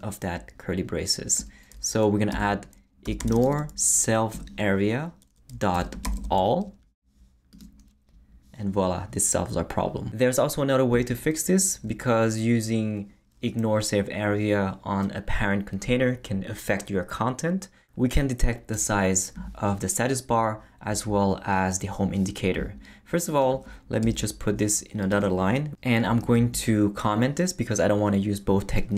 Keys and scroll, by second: 2.3-4.0 typing, 4.3 Return, 5.5-6.5 typing, 24.0 Return, 26.2 super+/.